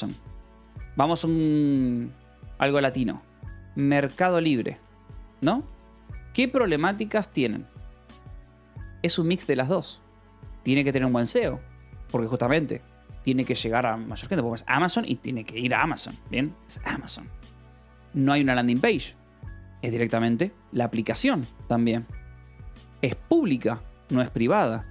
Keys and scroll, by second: 0.0-0.5 typing, 3.0-5.1 typing, 6.3 a, 6.6 BackSpace, 6.8 i, 7.0 Escape, 8.2 k, 9.0 k, 9.5 j, 11.2 shift+v, 16.7 Escape, 23.2 shift+v, 24.8 Escape.